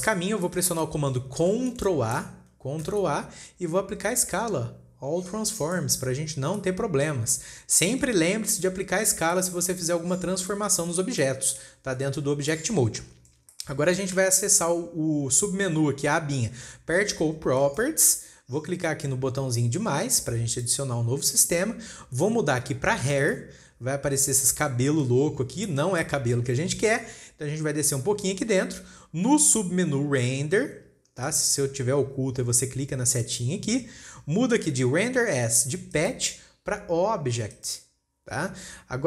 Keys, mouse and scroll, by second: 0.1-1.2 middle drag, 1.2-2.2 scroll up 1, 2.2-3.0 scroll up 1, 3.0 scroll up 1, 3.2 ctrl+a, 6.6-7.0 scroll down 3, 7.0-8.7 middle drag, 8.7-9.6 scroll up 2, 9.6 scroll down 3, 9.7-10.5 middle drag, 10.5-11.0 scroll up 4, 11.0-11.4 shift+middle drag, 11.4 scroll down 1, 11.6-13.8 middle drag, 13.8 scroll down 1, 14.0-18.0 shift+middle drag, 18.0 click, 20.9-23.9 drag, 24.4 scroll down 4, 24.6-25.7 middle drag, 25.7-26.1 scroll up 4, 26.1-28.3 shift+middle drag, 28.3-29.7 scroll down 2, 29.7-31.7 scroll down 1, 31.7-39.0 drag.